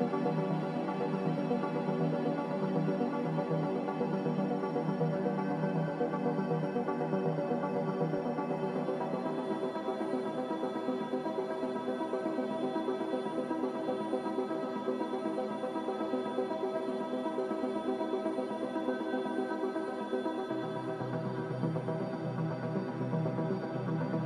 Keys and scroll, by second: 6.6 1, 7.0 Return, 7.0 5, 12.5 1, 12.5 5, 12.8 Return, 16.2 z, 17.7 typing, 18.0 Return, 21.9 c.